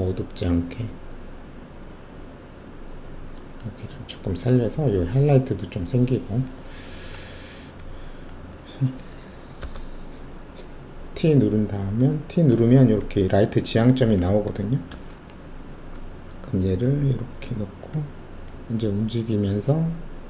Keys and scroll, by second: 9.6 alt+t, 14.8 alt+shift+2.